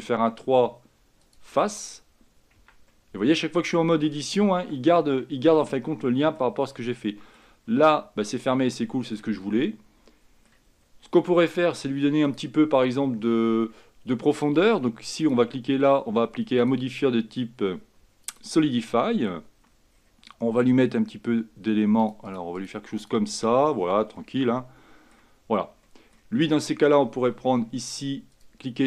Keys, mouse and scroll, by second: 1.8-2.7 scroll down 2, 2.7 Tab, 3.0-4.7 middle drag, 4.7 Tab, 5.2 Tab, 5.6 middle click, 6.5 scroll up 1, 6.7 scroll down 4, 7.1 middle click, 7.7-8.6 scroll up 3, 8.6-10.8 middle drag, 10.8-11.6 scroll up 1, 11.6 click, 15.4-19.7 drag, 20.0-22.2 scroll down 4, 22.2-24.3 drag, 24.3-25.5 middle drag, 25.5-26.0 scroll down 3, 26.0 middle click, 26.5 click.